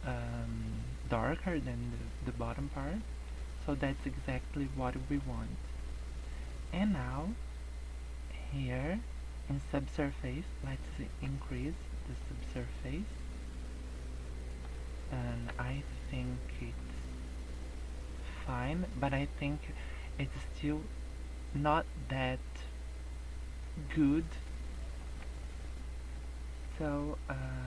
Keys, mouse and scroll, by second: 1.2 scroll down 4, 1.6 middle click, 2.6 scroll up 3, 3.0 middle click, 4.0-4.8 scroll down 6, 4.8 middle click, 5.4 scroll up 2, 6.4 middle click, 9.2-9.8 scroll up 5, 10.5 click, 12.6 scroll up 1, 14.2 middle click, 15.0 scroll down 3, 15.5 KP_0, 16.3 scroll down 2, 16.6 scroll up 5, 23.8 scroll down 2, 24.7-25.5 scroll down 16, 25.5 scroll up 4, 26.2 shift+middle click.